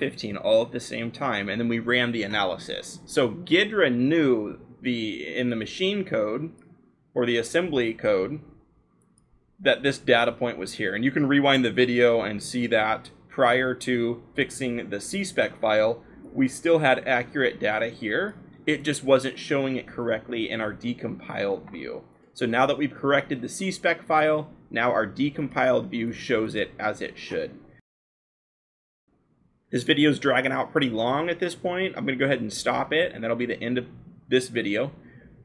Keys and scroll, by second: 23.2-24.7 scroll, 31.2-32.6 scroll.